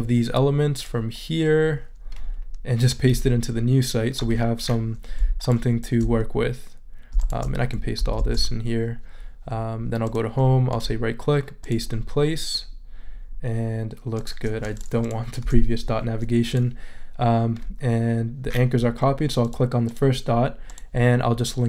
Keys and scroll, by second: 8.2 shift+super+c, 15.4 BackSpace.